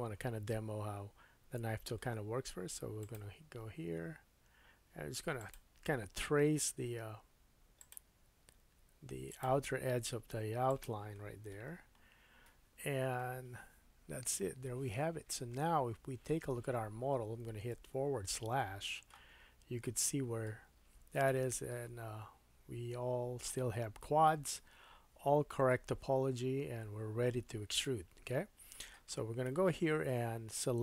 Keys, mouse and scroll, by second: 1.9 k, 12.3-14.6 scroll down 3, 15.6-16.1 scroll down 2, 17.7 /, 18.3-30.5 middle drag, 19.5-19.8 scroll up 1, 24.1-24.6 scroll up 4, 25.1-26.5 scroll up 1, 26.5-27.5 scroll down 3, 29.5 3, 30.5-30.8 drag.